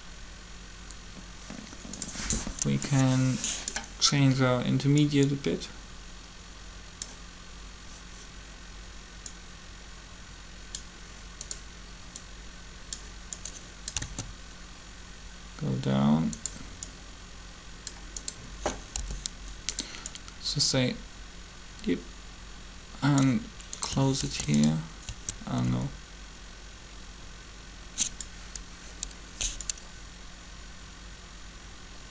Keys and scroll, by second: 14.0 alt+a, 18.8 b, 24.1 alt+g, 25.6 typing.